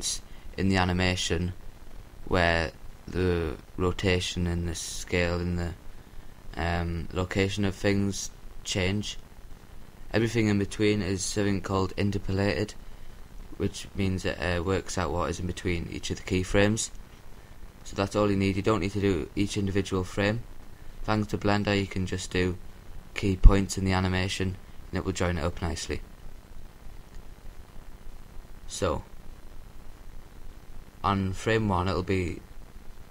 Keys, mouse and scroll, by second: 1.6-3.1 drag, 17.2-18.7 drag, 25.6-27.1 drag.